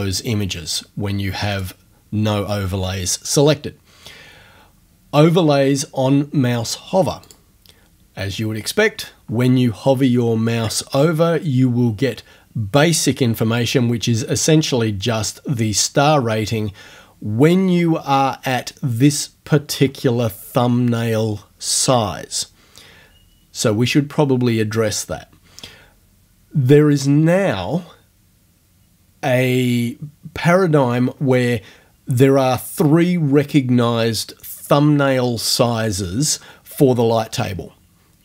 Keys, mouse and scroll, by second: 1.5 click, 7.3 click.